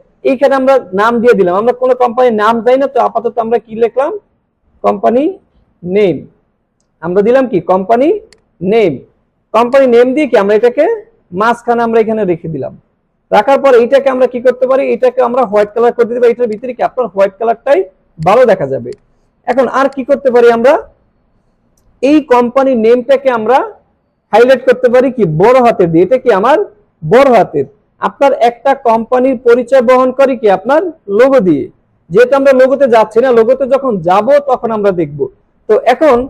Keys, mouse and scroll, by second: 3.4-6.3 typing, 3.4 click, 6.7 click, 8.3-12.5 drag, 13.4 space, 13.5-14.1 click, 14.1 alt+scroll up 1, 15.6 click, 17.5 alt+scroll down 1, 18.1 space, 18.2 click, 18.6 alt+scroll down 1, 18.8 space, 18.9 click, 19.7 space, 19.9 click, 20.3-20.6 space.